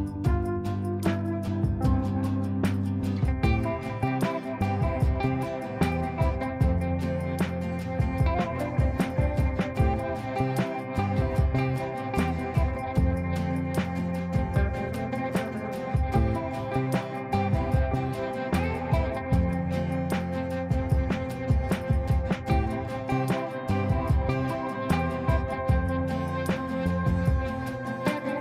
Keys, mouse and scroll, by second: 0.0-2.4 typing, 4.2 shift+l, 5.7-8.2 typing, 8.8 Return, 9.6-13.6 typing, 15.9 click, 16.9 right click, 18.4 click, 19.3-25.1 drag, 26.1-28.2 typing.